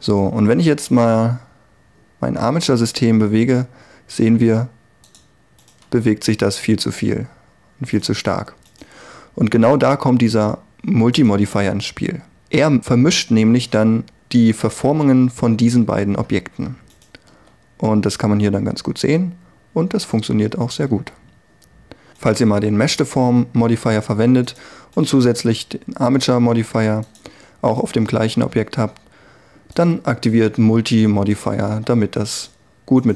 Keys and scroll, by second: 0.7 r, 5.9 r, 17.3 r, 21.1 r.